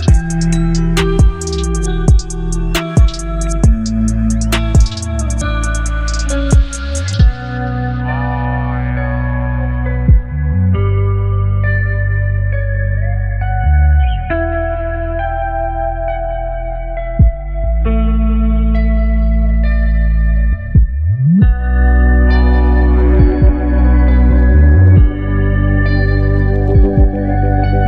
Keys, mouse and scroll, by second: 4.4 alt+scroll up 1, 6.7-17.8 drag, 18.3 ctrl+0, 20.5 click.